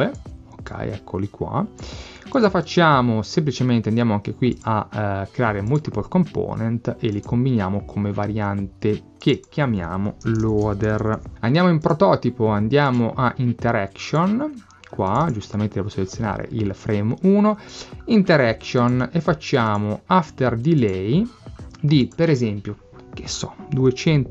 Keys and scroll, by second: 10.2-11.7 typing, 24.2 2.